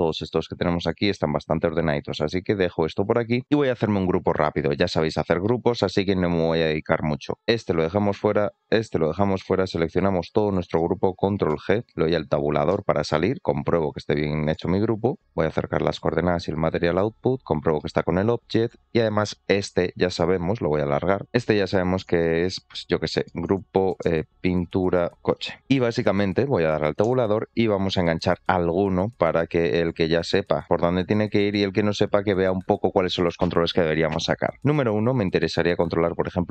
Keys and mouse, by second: 1.1 middle click, 1.8 click, 3.8 click, 4.6 shift+middle click, 5.0 middle click, 6.0 shift+middle click, 9.6-10.5 drag, 14.3 click, 16.2 click, 16.3 g, 17.7 shift+middle click, 18.5 click, 21.2-25.6 drag, 29.3 click, 30.3 ctrl+middle click, 32.4 middle click, 36.1 click, 36.4-36.5 drag.